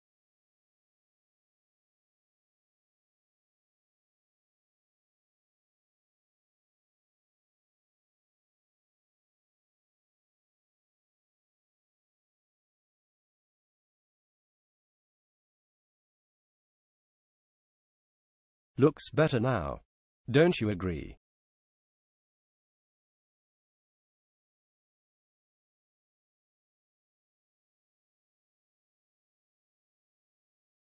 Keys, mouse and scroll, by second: 1.2 w, 12.6 a, 15.5-17.3 drag, 22.7-24.2 drag, 30.4-30.8 drag.